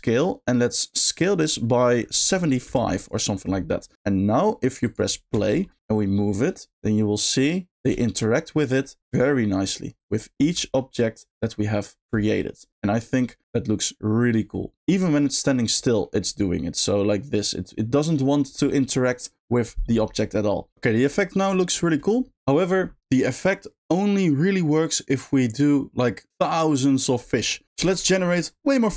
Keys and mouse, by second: 1.2-3.0 drag, 4.8 click, 5.3 space, 5.8 g, 8.0 shift+middle click, 8.8 middle click, 10.1 middle click, 10.4 g, 12.1 shift+middle click, 14.7 middle click, 15.6 click, 15.6 g, 16.0 middle drag, 20.8 shift+middle drag, 21.2-21.6 middle drag, 21.8 shift+middle drag, 22.6 middle drag.